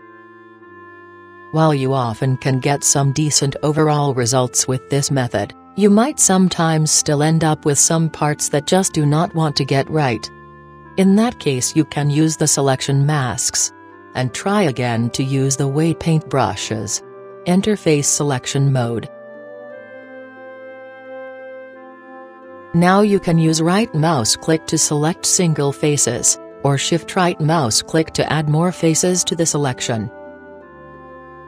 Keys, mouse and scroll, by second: 3.7-5.5 middle drag, 7.3-10.6 middle drag, 11.5-13.3 middle drag, 15.3-16.9 middle drag, 16.9 middle click, 17.4-21.9 middle drag, 22.5-24.4 drag, 25.3 right click, 26.2-26.8 middle drag, 26.3 right click, 27.0-28.7 middle drag, 29.7-31.4 right drag.